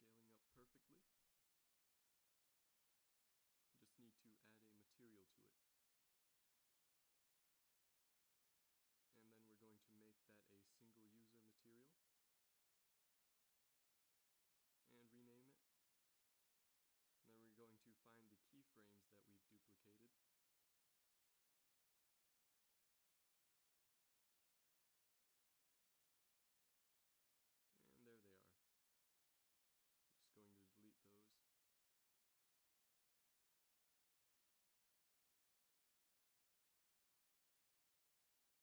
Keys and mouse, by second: 0.0 Right, 0.2 Right, 0.4 Right, 0.7 Right, 0.9 Right, 1.7 z, 2.0 z, 12.8-17.5 drag, 17.8-28.7 drag, 28.7 a, 29.2 b, 31.3 x, 33.1 click.